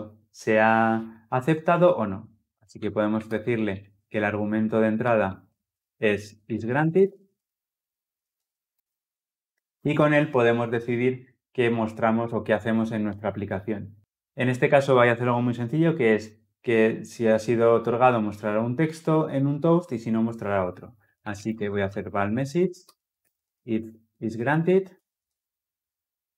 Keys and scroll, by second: 4.9 ctrl+z, 24.8 Return.